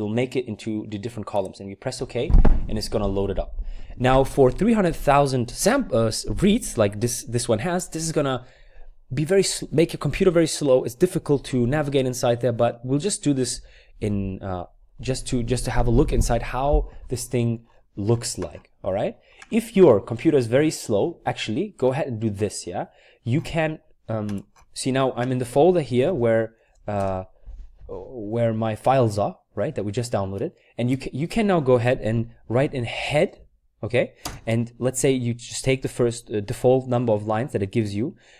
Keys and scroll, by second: 26.0-26.9 typing, 32.7-33.9 typing.